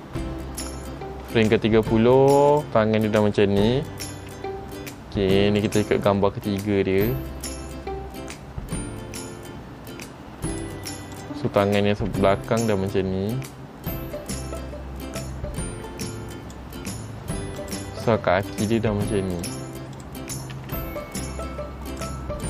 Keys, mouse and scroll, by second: 0.0 shift+middle click, 0.6-1.4 scroll up 1, 2.7 click, 2.7 scroll up 1, 4.3 r, 7.6 click, 8.8 r, 11.3 click, 12.1 r, 17.8 click, 18.7 r, 20.1 click, 20.7 r.